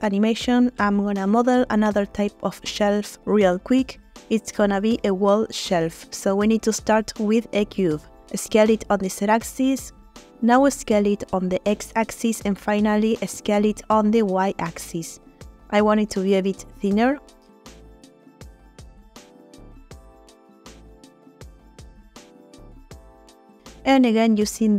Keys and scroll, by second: 3.3 shift+a, 4.6 s, 5.4 z, 9.6 s, 9.8 x, 13.3 s, 13.5 y, 16.8 s, 16.9 z, 18.9 s, 19.1 x, 20.8 s, 21.1 y.